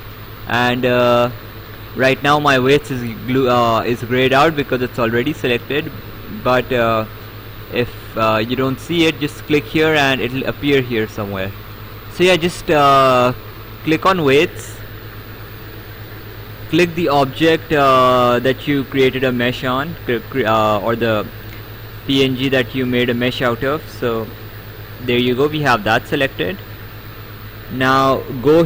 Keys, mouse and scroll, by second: 11.8 click, 13.8 click, 20.8 right click, 23.9 click, 25.8 right click.